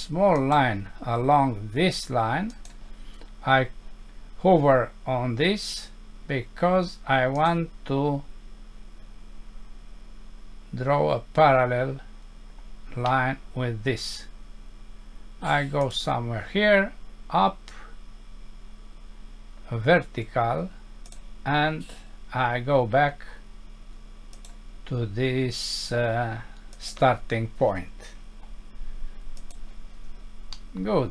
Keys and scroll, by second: 30.5 F6.